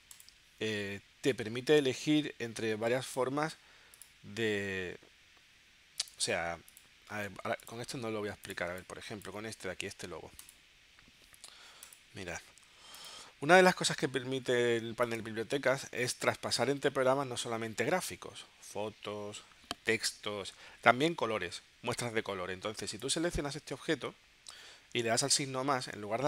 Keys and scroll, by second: 8.8 space, 13.7 space.